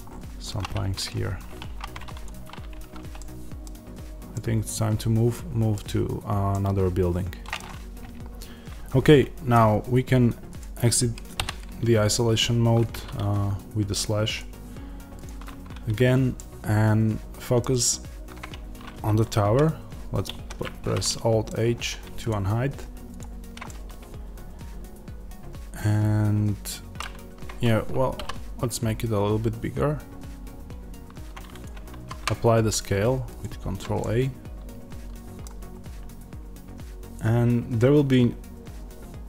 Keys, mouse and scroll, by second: 0.0-0.6 scroll up 2, 0.6 Tab, 1.6 1, 2.1 click, 3.1-11.3 middle drag, 5.7-6.4 scroll down 2, 8.1-10.0 scroll up 2, 10.0-11.3 scroll up 1, 11.3 KP_Divide, 16.2-22.2 middle drag, 18.0-20.2 scroll down 2, 20.2 alt+h, 21.4-22.2 scroll down 2, 22.2 click, 23.6-28.1 middle drag, 28.1 s, 31.5 click, 33.3 ctrl+a, 33.9 middle click.